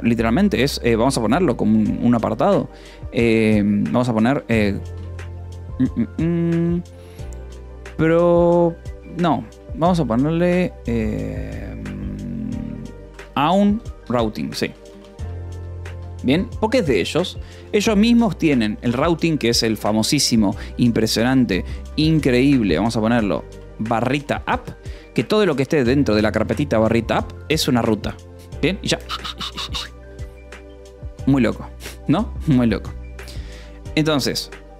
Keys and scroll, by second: 4.9 BackSpace, 7.7 o, 8.0 p, 8.6 e, 8.9 BackSpace, 13.1-17.8 typing, 19.9 l, 20.8 a, 21.2 Escape, 21.9-26.7 typing, 26.7 Escape, 32.5 Return.